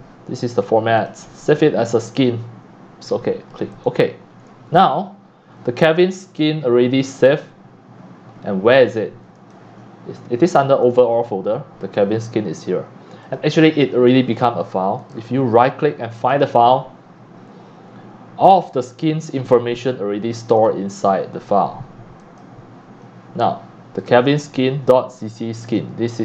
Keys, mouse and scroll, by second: 1.0-3.8 drag, 7.3-8.0 drag, 8.8 click, 10.8 click, 11.0 click, 13.2 click, 13.7 click, 15.0 right click, 16.3 click, 20.6 click, 22.2 click, 22.7 click, 23.6-25.7 drag, 25.8 click.